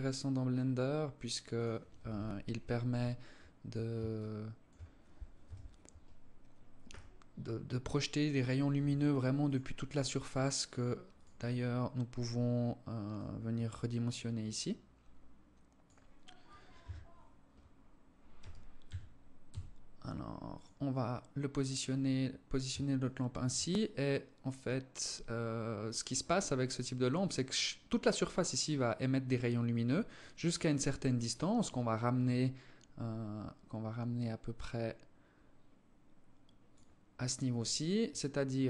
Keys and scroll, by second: 1.6 KP_7, 4.8 KP_7, 6.3 g, 8.2 r, 16.2 KP_3, 17.8 r.